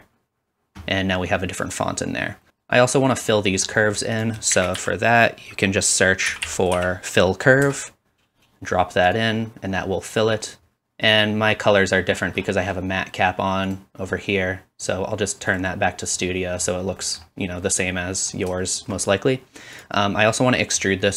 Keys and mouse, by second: 0.1-15.9 drag, 2.5-4.2 right drag, 4.5 typing, 9.2-9.9 typing, 13.7-19.9 middle drag, 13.7-15.9 right drag, 17.2 click, 17.2 right click, 19.9-21.1 drag.